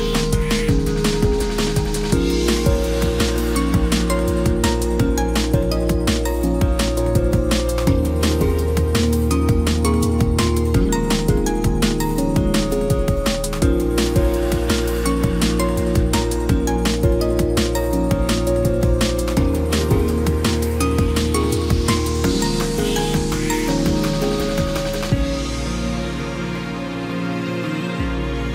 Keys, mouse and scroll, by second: 10.9 ctrl+j.